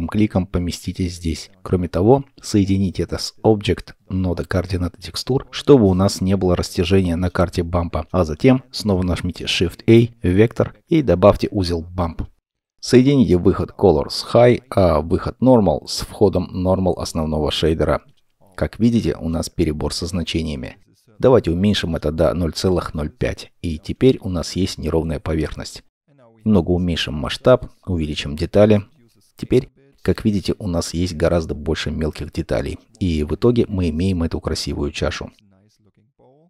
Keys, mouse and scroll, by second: 9.2 shift+a, 12.8-16.2 scroll up 1, 17.8 scroll down 1, 18.3 middle click, 21.1 scroll up 1, 23.5-25.6 typing, 24.6 Return, 28.5 Return, 28.5 typing, 30.5 Return, 30.5-32.0 typing, 32.9-33.6 scroll down 1, 33.6 middle click, 34.3 middle click, 35.8 scroll down 1, 36.2 middle click.